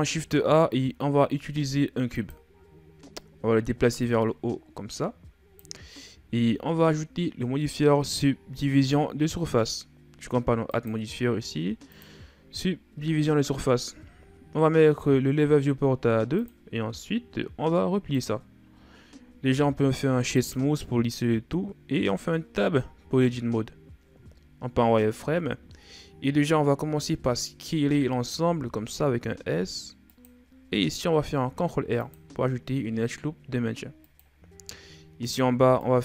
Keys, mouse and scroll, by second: 3.9-5.7 drag, 5.7-6.1 scroll down 4, 6.1-7.5 shift+scroll up 5, 10.5-13.5 drag, 16.2-19.2 drag, 19.2 w, 21.2-21.8 scroll up 2, 21.8 Tab, 24.0 z, 25.0 scroll down 1, 26.7 a, 26.9 a, 27.6 s, 30.9 ctrl+r, 35.0 right click, 35.4 b.